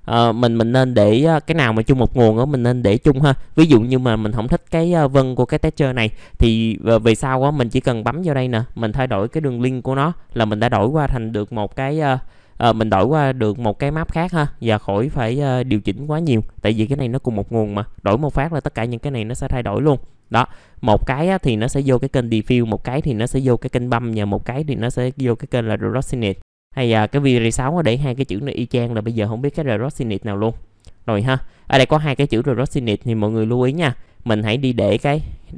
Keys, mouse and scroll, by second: 0.1-3.1 drag, 3.1 click, 5.1 click, 16.4 middle click, 19.5 scroll up 1, 19.7 middle click, 20.1-22.1 drag, 22.1-24.1 drag, 24.1-26.1 drag, 26.1 click.